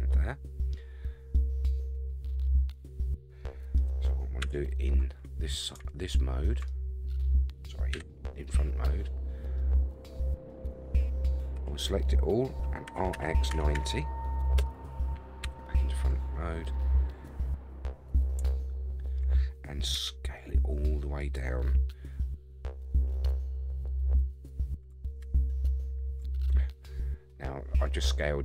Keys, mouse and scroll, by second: 0.6-1.2 scroll down 3, 1.3-3.7 middle drag, 4.4 KP_3, 5.2-5.7 scroll up 3, 6.1 shift+middle click, 7.9 KP_1, 8.6-9.1 scroll up 3, 9.1-9.6 scroll down 3, 9.6-11.4 middle drag, 11.5 a, 12.9 r, 15.4 KP_1, 16.1-17.2 scroll up 3, 18.5 shift+middle click, 19.9 s, 25.2 ctrl+z, 27.8-28.4 middle drag.